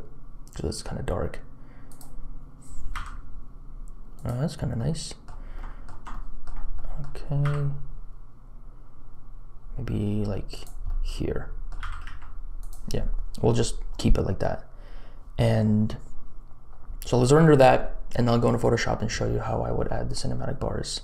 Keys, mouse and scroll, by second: 2.9 g, 4.9 click, 5.7 shift+click, 6.3 shift+click, 6.9 click, 7.4 g, 11.0 click, 11.8 g.